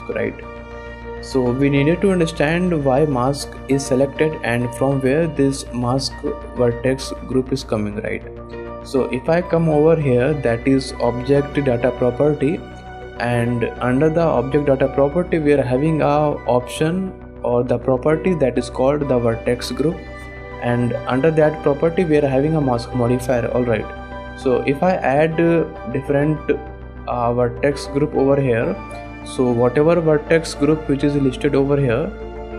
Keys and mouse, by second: 0.9 shift+click, 8.5 shift+middle click, 12.1 click, 25.8 click, 26.0 click, 26.3-32.5 drag.